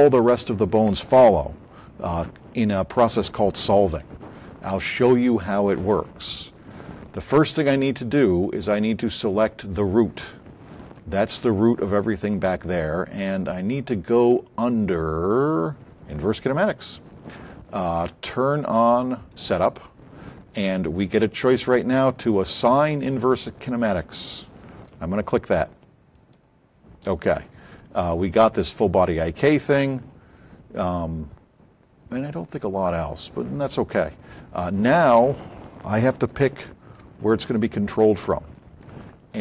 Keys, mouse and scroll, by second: 8.2 click, 9.2 click, 16.3 click, 26.1 click, 36.2-37.0 shift+drag, 37.2 click.